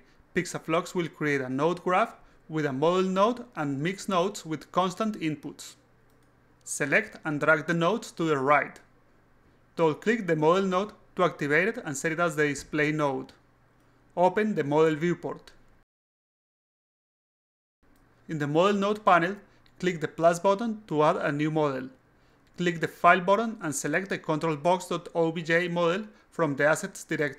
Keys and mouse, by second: 6.8-7.8 drag, 8.1-9.2 drag, 9.9 click, 10.0 click, 14.4 click, 15.0 click, 16.0-16.7 drag, 17.4 click, 20.9 click, 22.9 click, 24.3 click, 24.5 click.